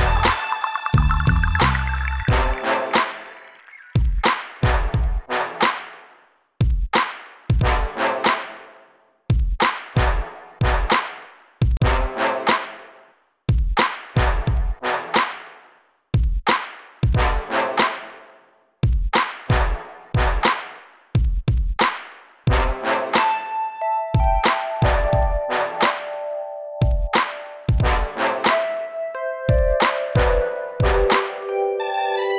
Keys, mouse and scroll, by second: 1.8 click, 4.3 click, 5.3 click, 5.7 scroll down 2, 6.8 click, 8.2 click, 8.8 click, 9.9 click, 12.2 click, 14.8 click, 15.9 click, 16.3 scroll down 2, 19.1 click, 20.0 click, 21.6 click, 22.6 click, 24.6 click, 24.8 click, 27.3 click, 28.5 click, 29.3-29.6 scroll down 2, 30.0 click, 31.2 click.